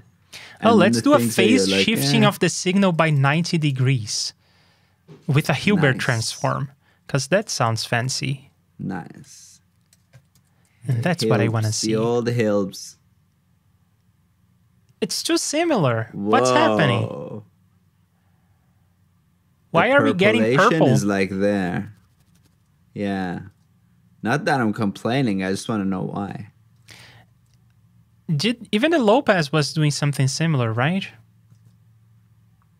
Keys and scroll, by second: 3.6 super+c, 3.9 super+Tab, 10.0 super+v, 10.3 super+c, 10.8 super+j, 23.5 super+Tab, 26.7 super+Tab, 30.8 super+Tab.